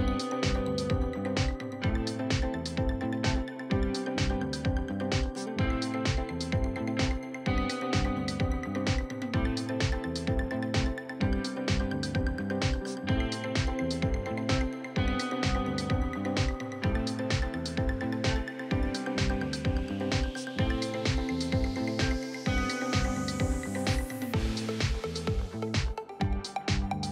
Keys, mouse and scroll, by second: 15.8-16.3 scroll up 3, 16.0 shift+middle click, 16.3 shift+middle click, 16.7 click, 17.3-18.5 shift+drag, 23.0 click, 26.1 click, 26.8 s.